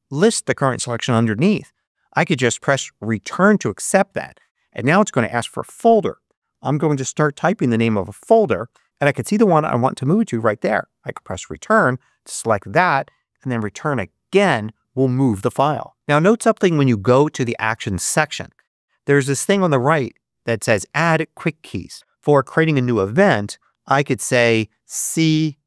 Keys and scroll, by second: 3.1 Return, 6.2-7.9 typing, 11.0 Return, 16.5 super+3, 25.0 c.